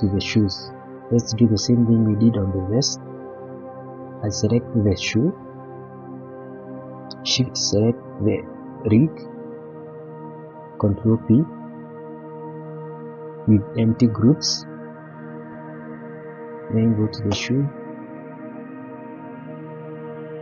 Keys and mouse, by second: 1.6-1.9 shift+middle drag, 2.3-3.5 middle drag, 4.7 middle drag, 5.2-5.6 shift+middle drag, 6.4 shift+middle click, 10.9 ctrl+p, 15.6 click, 16.7 shift+middle click, 18.3-19.4 drag.